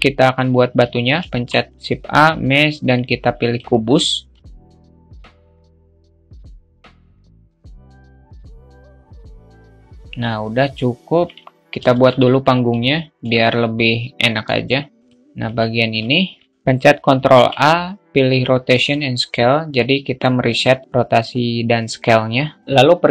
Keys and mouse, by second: 1.1 shift+a, 4.0 click, 4.9 click, 5.4 alt+middle click, 6.0 alt+middle click, 6.4 click, 7.0 alt+middle drag, 8.0 click, 8.7 click, 9.6-11.0 middle drag, 11.7 shift+a, 15.4 shift+middle click, 16.2 alt+middle click, 17.0 ctrl+a.